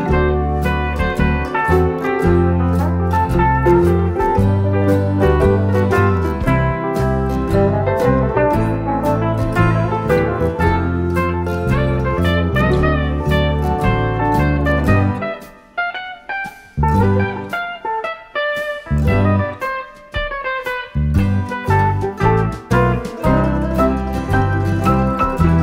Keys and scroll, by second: 4.7 F7, 5.1 F1, 6.4-6.8 typing, 8.2 space, 9.1 shift+F6, 11.2 +, 16.9 F1, 17.1 space, 18.1 shift+F6, 20.6 F1, 21.7 ctrl+-, 22.2-23.3 typing, 24.8 Page_Down, 25.5 ctrl+d.